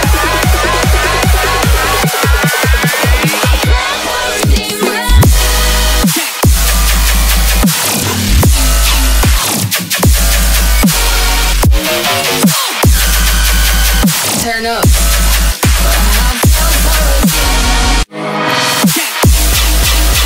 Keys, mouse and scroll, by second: 2.0 middle click, 12.6 middle click, 17.5 middle click, 20.0 middle click.